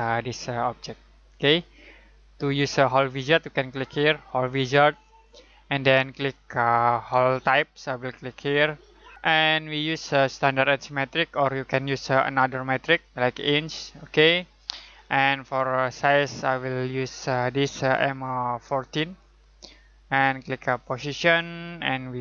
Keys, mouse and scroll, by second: 4.2 click, 8.2 click, 10.4 click, 11.8-12.6 scroll up 1, 14.1 click, 18.7 click.